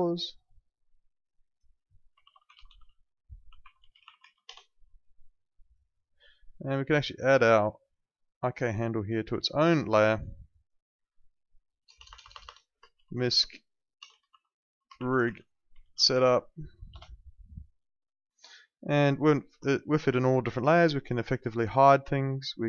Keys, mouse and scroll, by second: 1.9-4.7 typing, 5.6 click, 11.8 BackSpace, 12.9-16.8 typing, 16.9 Return, 18.9 click, 19.9 alt+click, 20.1 alt+right click, 20.3 alt+middle click, 20.5 alt+right click, 21.6 click.